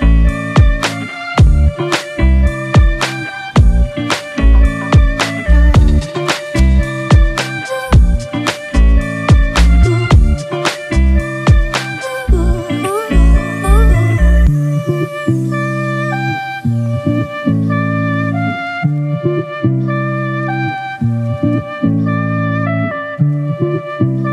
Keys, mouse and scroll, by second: 4.2 ctrl+Return, 6.0 ctrl+shift+i, 11.4 alt+BackSpace, 12.8 ctrl+d, 18.8 alt+BackSpace.